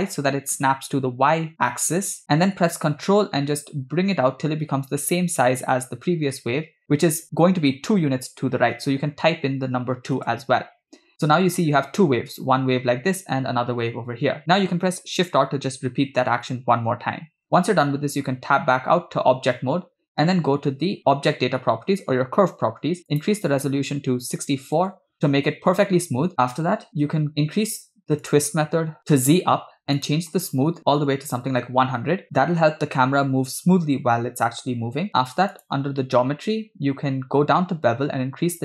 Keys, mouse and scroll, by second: 15.4 shift+r, 17.4 Tab, 21.0 click, 23.2-24.8 drag, 28.3-29.5 drag, 30.0-31.9 drag, 31.1 0, 35.6 click, 36.3-36.7 scroll down 4, 37.8-38.3 scroll down 2.